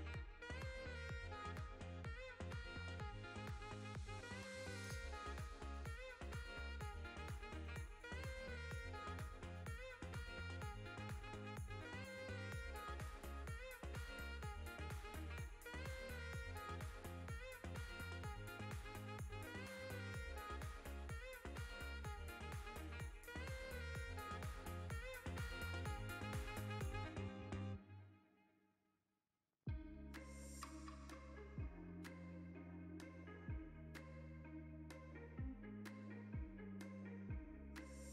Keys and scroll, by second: 6.6 ctrl+b, 15.4 Tab, 22.2 Tab, 23.4 a, 24.2 g, 24.8 z, 26.0 KP_1, 27.7 g, 28.4 z, 29.1 Tab, 31.2 g, 31.7 z, 32.5 x, 35.8 s, 37.2 shift+z, 37.7 shift+z.